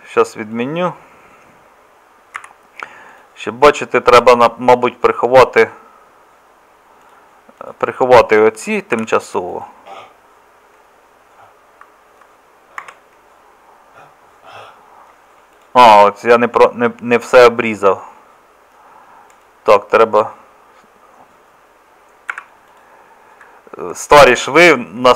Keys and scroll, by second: 2.4 z, 5.3 Tab, 9.0 h, 12.8 Tab, 22.3 Escape.